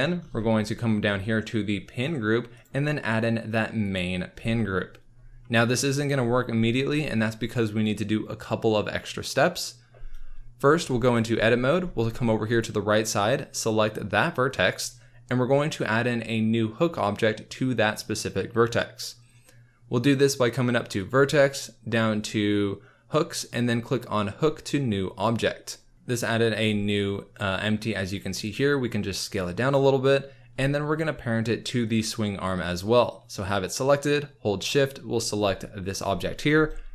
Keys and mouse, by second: 2.5-3.9 right drag, 10.7 Tab, 21.0-25.2 drag, 25.9 Tab, 26.6 s, 34.6 shift+click.